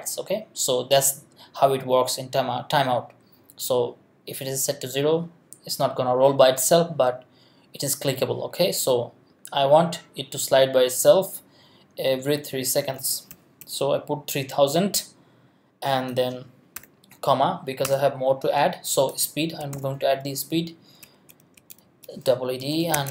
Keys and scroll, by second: 13.0 3, 13.3 0, 16.7 ,, 17.8 Return, 19.4-23.1 typing.